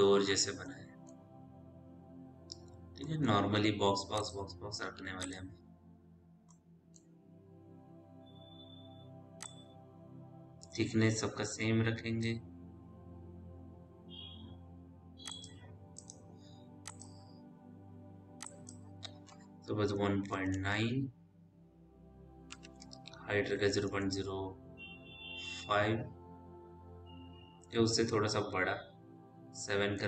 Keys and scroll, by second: 20.4 KP_Decimal, 22.3 KP_9, 22.7 Tab, 23.3 KP_0, 23.7 ., 24.4 KP_0, 29.9 KP_7.